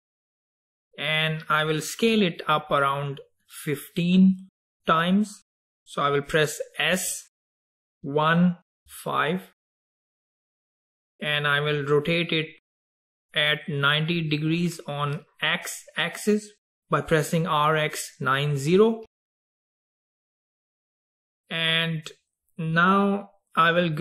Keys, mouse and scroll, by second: 7.0 s, 10.2-11.6 middle drag, 11.6-12.9 scroll down 2, 12.9-16.0 scroll down 2, 19.2 r.